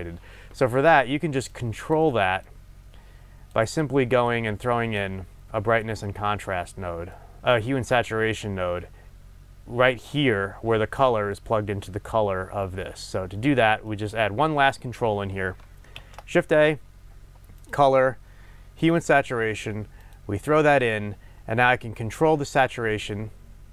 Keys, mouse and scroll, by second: 1.5 click, 2.5-3.9 drag, 5.0-6.3 drag, 6.3-20.2 middle drag, 10.9-13.2 scroll down 1, 13.2-13.9 scroll up 1, 14.6-16.0 scroll up 1, 16.0 shift+a, 20.2 click.